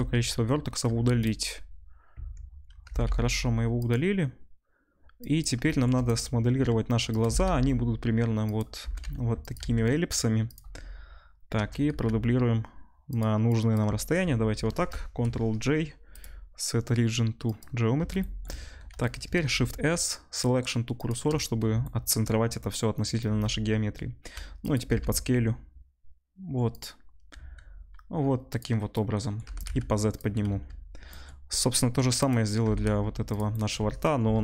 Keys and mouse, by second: 0.8 x, 2.1 Tab, 2.8 g, 4.0-5.3 middle drag, 5.3-6.1 shift+drag, 6.1-13.4 middle drag, 6.5 s, 7.2 s, 8.8 g, 9.6 s, 11.5 shift+d, 13.4-14.8 drag, 15.2 ctrl+j, 15.2 ctrl+click, 18.1 shift+click, 18.1 shift+right click, 19.5-21.2 shift+drag, 19.5-21.2 shift+middle drag, 19.5-21.2 shift+right drag, 19.5 shift+s, 23.2 s, 24.7-34.4 drag, 24.8 g, 27.3 s, 29.4 g, 30.4 z, 32.1 middle click, 32.1 right click, 32.6 g, 34.2 KP_7.